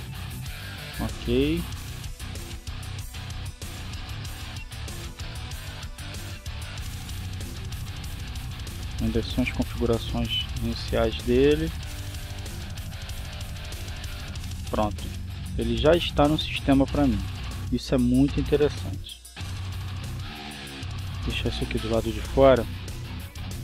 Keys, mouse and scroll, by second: 0.7 click, 4.3-5.3 drag, 5.7-6.9 drag, 7.1 click, 9.7 click, 11.0 click, 13.0 click, 14.4 click, 17.8-18.8 drag, 19.5 click, 22.5-23.6 drag.